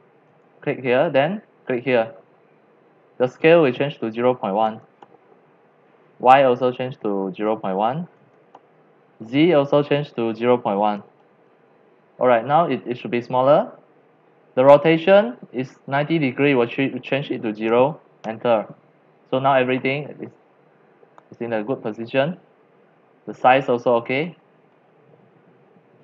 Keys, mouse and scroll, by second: 0.4 click, 1.8 click, 3.5 click, 4.4-5.9 typing, 4.4 click, 6.6 click, 7.3 click, 8.0-9.0 typing, 9.7 click, 10.6-11.6 typing, 10.6 click, 12.2 scroll down 1, 12.3-13.3 scroll up 13, 13.3 scroll, 13.4-13.7 scroll down 2, 14.0 middle click, 16.5 click, 17.3 click, 17.7 typing, 18.2 Return, 19.0-19.4 scroll up 7, 19.4 scroll down 2, 20.1-22.6 middle drag, 23.2 middle click, 24.7 middle click, 25.0 middle click, 25.1 middle click, 25.7 middle click, 25.7 middle click.